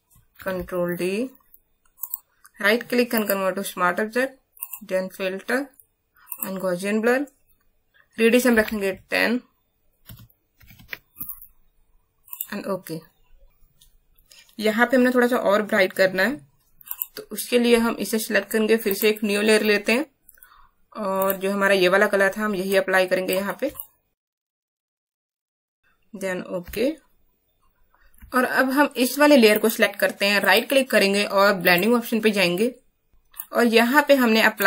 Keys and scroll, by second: 0.3 ctrl+d, 8.8 shift+Insert, 10.0 Num_Lock, 10.5 KP_1, 10.7 KP_0, 23.6 alt+space, 25.5 space.